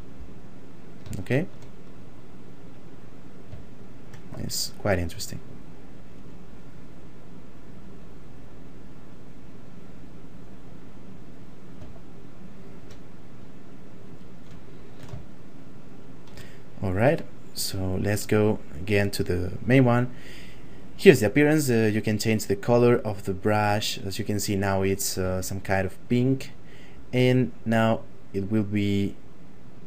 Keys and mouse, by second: 1.2 shift+middle click, 2.0 click, 3.8 shift+middle click, 4.8 click, 12.0 shift+middle click, 13.4 click, 14.6 ctrl+middle click, 15.3 shift+middle click, 17.7 click, 25.2 f, 25.8 click, 29.7 click.